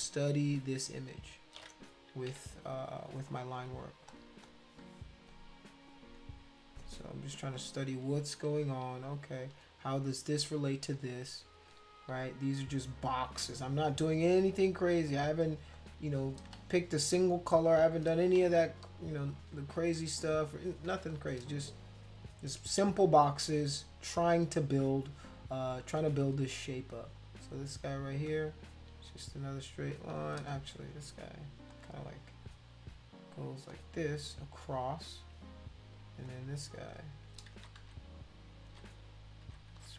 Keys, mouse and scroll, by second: 0.2 click, 2.3 b, 3.6 click, 4.1 click, 4.4 click, 7.5 click, 9.0 shift+click, 9.8 click, 10.5 shift+click, 11.2 click, 13.4 shift+click, 14.9 click, 15.7 shift+click, 16.6 ctrl+z, 17.0 click, 17.6 shift+click, 18.4 ctrl+z, 18.6 click, 19.3 click, 20.0 shift+click, 20.6 click, 21.1 shift+click, 24.9 click, 25.7 click, 26.5 click, 27.1 shift+click, 28.0 click, 30.6 ctrl+z, 31.7 click, 33.7 shift+click, 36.2 click, 36.7 shift+click, 37.5 ctrl+z, 37.8 ctrl+z, 38.7 ctrl+z, 38.9 ctrl+z, 39.4 ctrl+z, 39.7 ctrl+z.